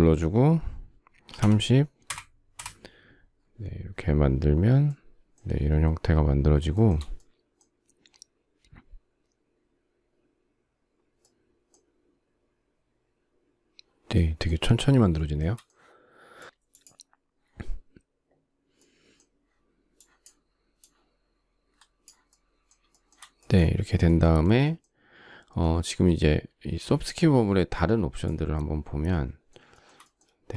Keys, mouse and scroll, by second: 1.0-1.9 typing, 2.1 Return, 6.8 shift+middle click, 22.5 shift+middle click, 29.3 shift+middle click, 29.9 space.